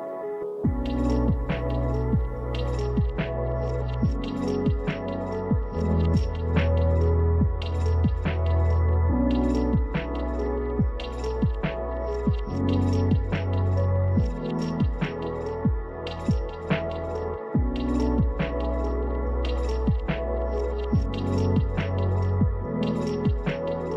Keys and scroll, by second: 1.3 space, 3.3 space, 16.9 space.